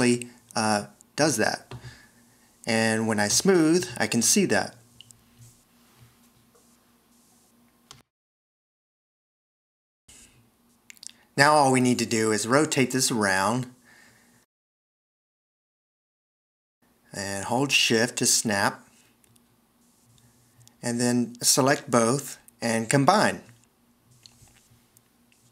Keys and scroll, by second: 0.0 v, 1.0 c, 10.0 BackSpace, 10.4 super+c, 22.5 shift+super+c.